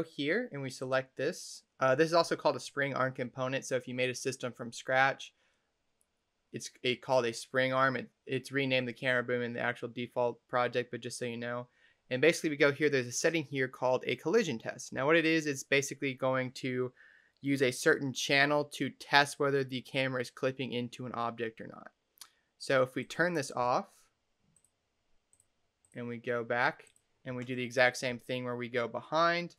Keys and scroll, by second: 28.0 w, 29.4 w.